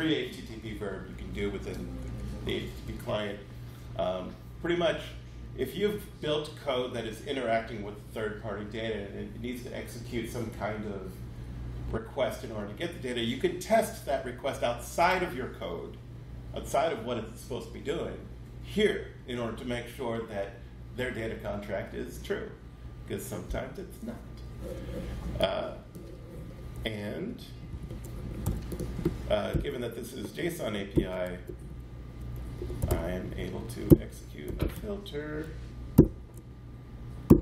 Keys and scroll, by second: 27.3 shift+Up, 27.7 shift+super+Left, 28.5 super+c, 29.5 Return, 29.7 super+v, 30.7-36.0 typing, 37.3 =.